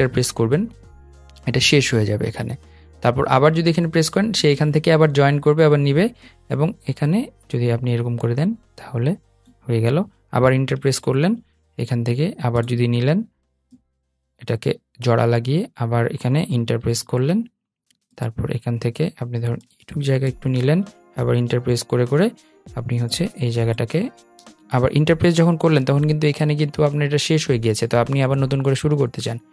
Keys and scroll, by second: 10.8 Return, 16.9 Return, 24.1 super+z.